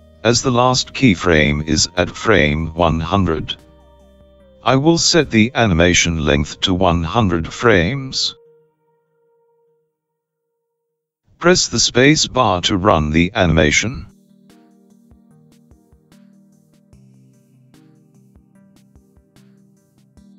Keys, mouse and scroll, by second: 4.9 click, 8.9 KP_0, 15.0 space.